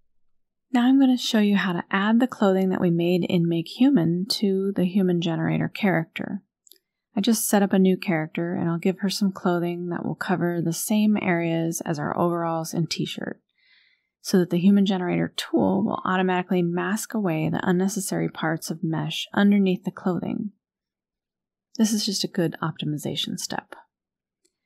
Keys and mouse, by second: 2.4-3.9 drag, 4.9-10.2 drag, 12.9 click, 14.9 click, 15.3 click, 18.3-20.1 drag, 22.4 click.